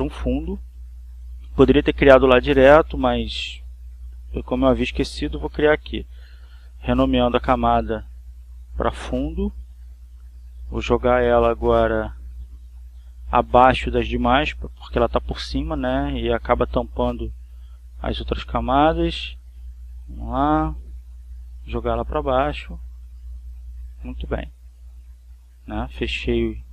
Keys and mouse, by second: 0.2 click, 1.6-3.6 drag, 5.2 click, 6.4-7.5 drag, 7.6 click, 8.8-10.1 typing, 10.9 Return, 11.8-18.1 drag, 20.7 click, 22.2-24.2 drag, 25.4 click, 26.0 click.